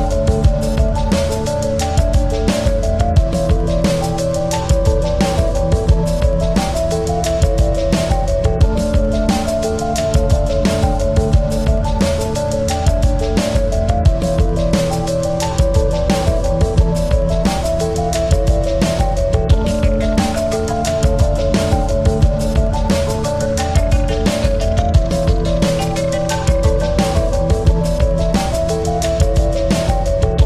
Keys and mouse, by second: 0.1 ctrl+-, 0.7 space, 1.3 click, 1.4 space, 3.9 click, 4.0 ctrl+=, 5.0 space, 8.0 right click, 10.0 click, 11.2 click, 13.3 click, 15.9 click, 18.0 click, 19.8 click, 21.0 shift+click, 22.5-24.7 drag, 24.7 click, 24.9-27.8 shift+drag.